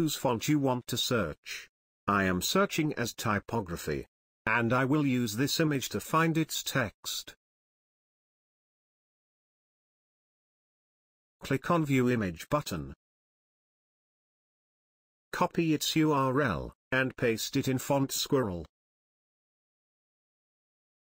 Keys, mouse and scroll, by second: 1.0 Return, 6.2 click, 12.6 click, 15.2 click, 18.8 click, 18.9 click, 19.8 right click.